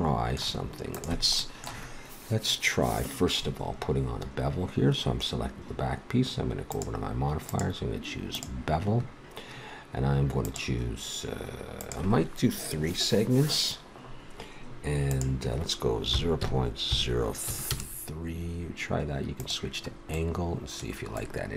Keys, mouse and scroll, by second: 0.9-2.7 drag, 2.7-4.1 middle drag, 6.7-9.5 drag, 10.4-13.7 drag, 15.1-16.9 drag, 19.4 click, 19.9 middle click, 20.1 click, 20.3 click, 20.5 click, 20.6 middle click.